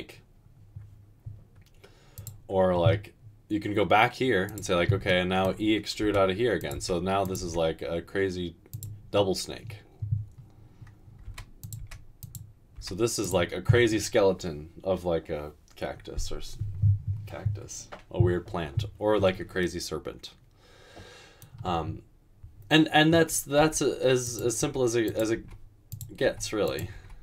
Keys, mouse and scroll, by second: 6.1-7.4 typing, 11.4-12.8 typing, 23.8-26.9 typing.